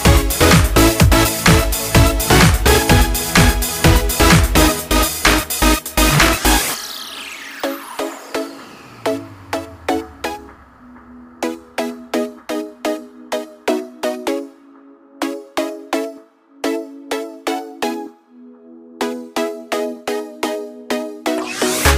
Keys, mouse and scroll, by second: 2.2 Down, 3.4 Down, 4.3 Up, 4.5 Down, 5.4 Up, 8.2-21.5 drag.